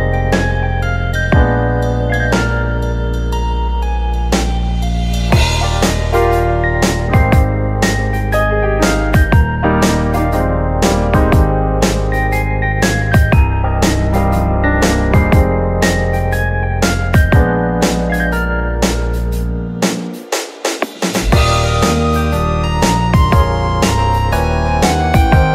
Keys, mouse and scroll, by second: 0.6 ctrl+r, 2.5 middle click, 3.2 scroll down 2, 5.0-6.6 drag, 6.6 Tab, 6.9 click, 7.3-7.7 scroll down 2, 7.7 click, 8.3-9.2 middle drag, 9.2 click, 9.6 Tab, 10.1 Tab, 10.4 click, 10.9 KP_1, 11.6 click, 13.8 click, 14.3 middle click, 14.6 Tab, 15.1 middle click, 15.7-16.3 scroll up 2, 16.3 middle click, 16.6 click, 17.1 alt+shift+click, 17.5 alt+shift+click, 18.7 shift+d, 19.5 p, 20.9 Tab, 21.3 click, 22.0 Tab, 22.3-23.4 middle drag, 23.4 click, 24.1 middle click, 24.5 c.